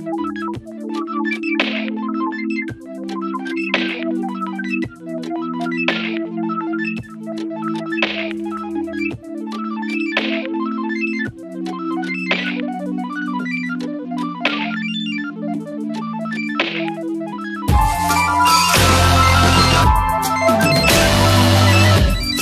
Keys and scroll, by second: 5.6 s, 6.4 [, 10.9 space, 12.4 ], 14.8 space, 17.6 space.